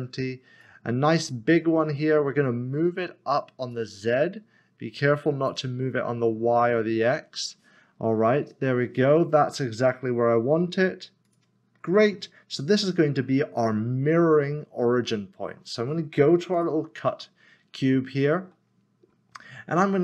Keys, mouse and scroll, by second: 3.7 click, 11.2 click, 16.5 click.